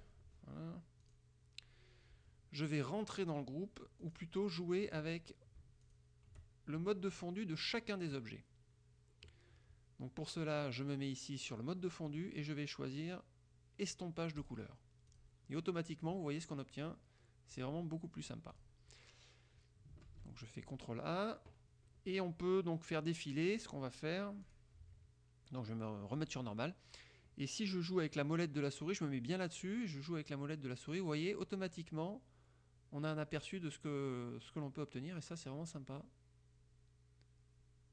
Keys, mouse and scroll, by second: 1.2 click, 4.2 click, 5.0 click, 6.0 shift+click, 12.2 click, 14.5 click, 15.2 click, 15.7 click, 17.7 click, 18.7 click, 20.2 ctrl+a, 24.6 click, 26.3 click, 30.0 scroll down 2, 31.5 scroll down 2, 32.2 scroll down 2, 32.9 scroll down 2, 33.6 scroll down 2, 34.9 scroll down 2, 35.6 scroll down 2, 36.1 scroll down 2, 36.6 scroll down 2, 37.2 scroll down 2, 37.8 scroll down 2.